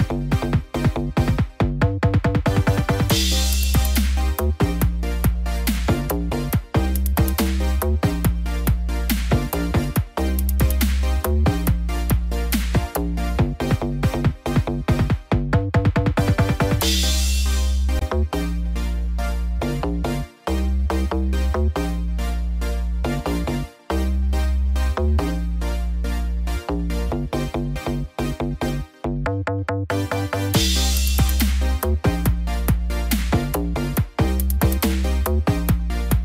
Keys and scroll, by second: 14.1 ctrl+=, 14.6 ctrl+=, 27.6 ctrl+=, 33.8 ctrl+-, 34.4 ctrl+0.